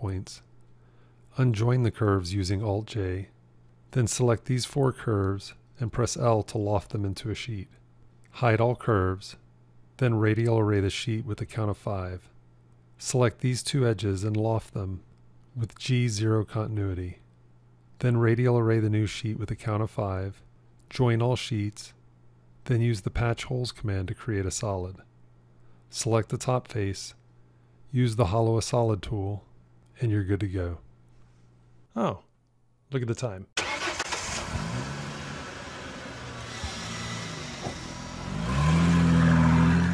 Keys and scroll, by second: 2.8 alt+j, 6.1 l, 21.3 j.